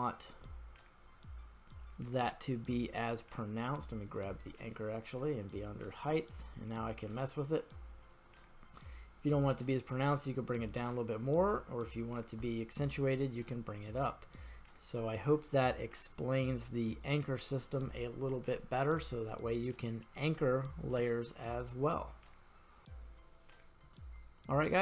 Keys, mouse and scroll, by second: 4.1 click, 5.6 click, 6.4-8.5 drag, 9.3-11.6 drag, 12.8 scroll up 2, 13.5-14.4 scroll down 4, 14.4-17.6 middle drag, 18.1-19.0 scroll up 3, 19.0-20.4 middle drag, 22.8 middle click, 22.8-23.9 scroll down 2, 23.9-24.8 middle drag.